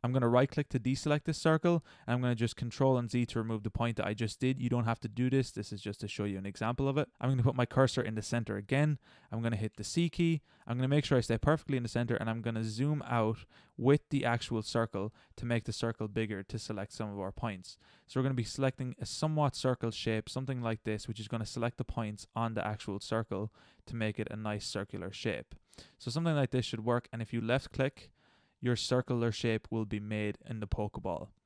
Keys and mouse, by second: 0.5-2.5 middle drag, 3.1 ctrl+z, 6.4 ctrl+z, 9.7 c, 29.9-31.1 middle drag.